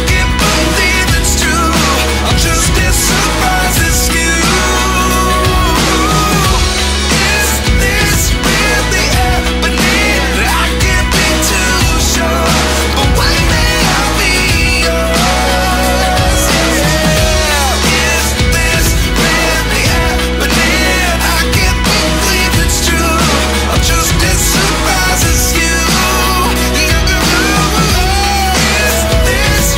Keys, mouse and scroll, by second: 23.4-26.0 drag.